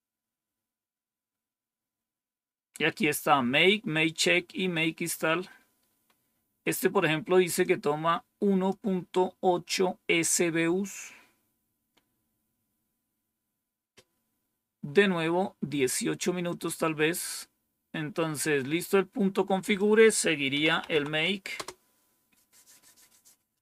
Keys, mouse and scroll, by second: 1.2-1.9 scroll down 2, 4.6 scroll up 2, 7.5-8.6 drag, 16.3 click, 17.2 scroll down 1, 18.1-19.4 scroll down 2, 19.5 click, 20.2-21.3 typing, 21.4 Return.